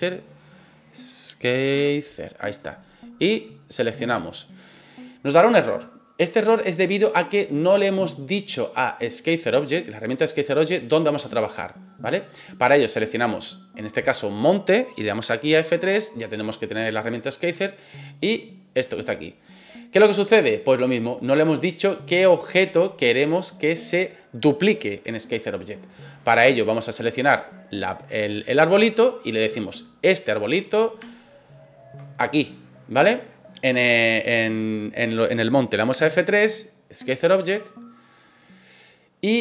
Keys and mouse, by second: 12.8 right click, 15.2 F3, 26.3-26.7 shift+middle drag, 27.8 right click, 31.4 shift+right click, 35.9 F3.